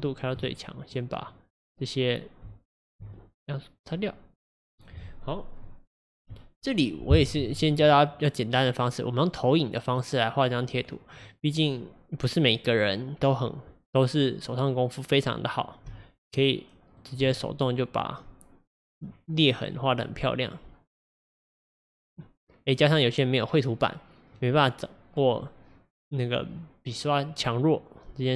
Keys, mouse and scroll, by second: 1.3-2.4 drag, 2.4 f, 3.0 f, 3.2-6.2 drag, 15.9-17.2 f, 17.4-19.0 drag, 19.5-27.4 drag.